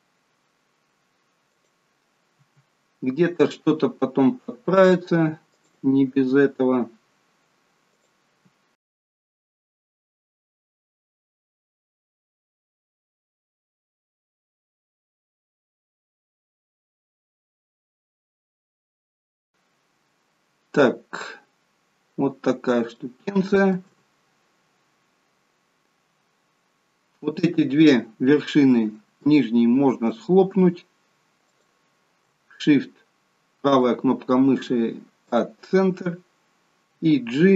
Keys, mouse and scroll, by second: 2.3 e, 6.2 e, 8.8 shift+middle click, 9.3 e, 10.0 e, 10.5 e, 11.6 shift+middle click, 12.2 e, 13.2-15.8 typing, 16.5 shift+middle click, 17.1 e, 17.9 e, 21.2-22.8 scroll down 4, 22.9 shift+middle click, 24.6-26.0 scroll up 3, 28.5-28.9 scroll up 3, 29.3 shift+middle click, 31.5 shift+click, 33.7 right click.